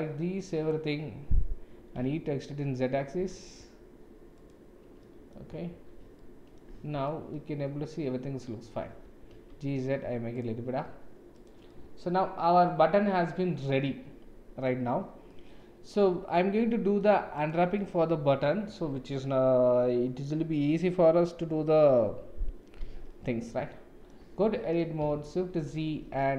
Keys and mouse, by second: 1.8 e, 5.0 click, 5.0 right click, 5.2 middle click, 5.7 shift+z, 6.2 middle click, 6.8 Tab, 7.0-8.7 middle drag, 9.0 g, 11.7-14.6 middle drag, 15.3-16.9 middle drag, 17.3 click, 17.8-18.7 middle drag, 23.4-24.1 middle drag, 24.4 Tab, 25.1 shift+z.